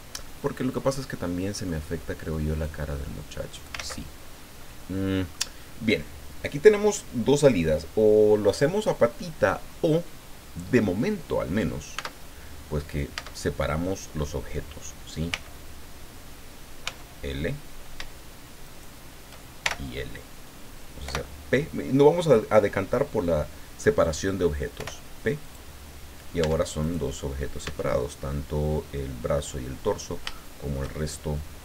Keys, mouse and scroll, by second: 0.4-1.8 middle drag, 2.6-3.8 drag, 3.8 ctrl+z, 4.6 middle click, 11.9 Tab, 13.1 Tab, 15.3 l, 16.8 l, 18.6 shift+right click, 19.6 shift+l, 21.0 p, 24.7 p, 25.4 click, 26.4 Tab, 26.8 right click, 27.6 Tab, 30.3 shift+click.